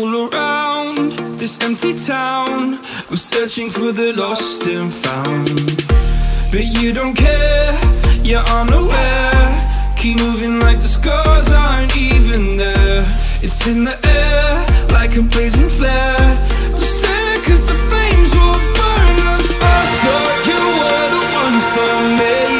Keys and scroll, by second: 3.5 v, 16.4 3.